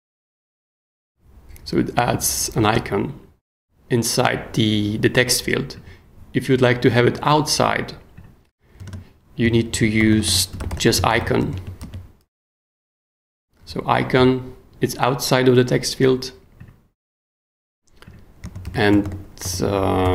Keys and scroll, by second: 8.8 space, 9.4 super+space, 9.7 super+k, 10.0-11.6 typing, 11.8 super+s, 18.6 super+k, 18.9 b, 19.9-20.1 typing.